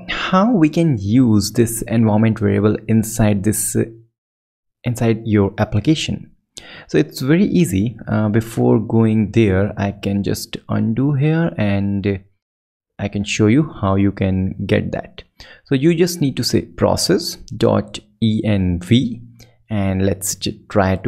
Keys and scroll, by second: 1.2 alt+super+Right, 10.6 super+Down, 11.5 Up, 12.3 Return, 19.5 BackSpace, 20.2 super+Right.